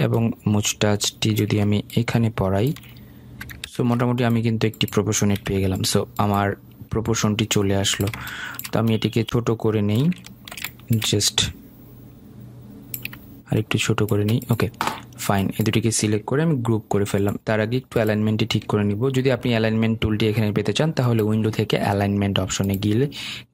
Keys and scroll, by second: 4.2 ctrl+shift+], 5.8 Delete, 19.6 ctrl+g.